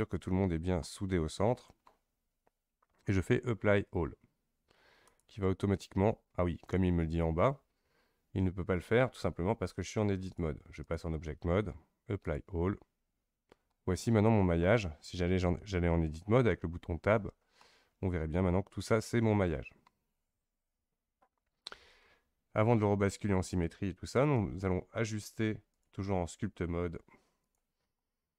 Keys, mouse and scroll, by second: 0.8-5.0 middle drag, 5.0-8.1 drag, 10.2-13.7 drag, 13.7-16.7 middle drag, 17.2 Tab, 17.6-21.3 middle drag, 21.3-24.3 scroll down 1, 25.7-28.0 drag, 28.0-28.3 middle drag.